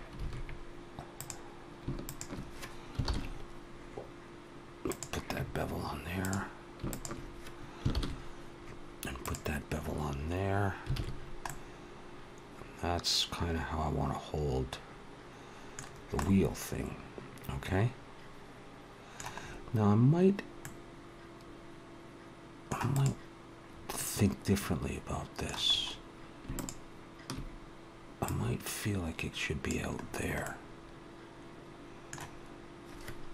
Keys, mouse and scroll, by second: 0.4 alt+a, 1.0 click, 1.9 shift+click, 2.9 ctrl+l, 6.3 click, 6.7 shift+click, 7.8 ctrl+l, 11.0 alt+a, 11.0-11.3 scroll down 2, 11.3 middle click, 15.7-18.0 scroll down 3, 16.0 middle click, 19.8-20.4 scroll up 3, 20.5 middle click, 22.7 click, 23.5-23.8 scroll up 2, 23.8 middle click, 25.4-25.8 scroll up 3, 26.4 shift+click, 28.1 click, 29.8-30.2 scroll down 4, 30.3 middle click.